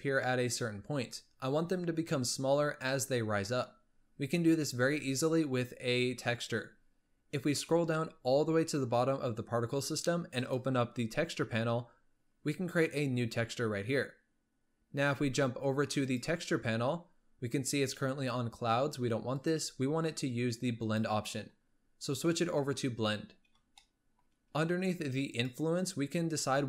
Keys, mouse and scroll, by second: 5.0-5.9 scroll down 10, 6.5-7.2 scroll down 2, 7.2-8.4 scroll down 19, 10.5-11.1 drag, 11.1-12.9 scroll down 6, 12.9-16.0 drag, 16.2 click, 17.2-19.5 scroll up 3, 19.5-22.6 drag, 23.3-23.8 scroll up 1, 23.8-25.4 shift+middle drag, 25.4-26.4 drag, 26.4-26.6 scroll down 3.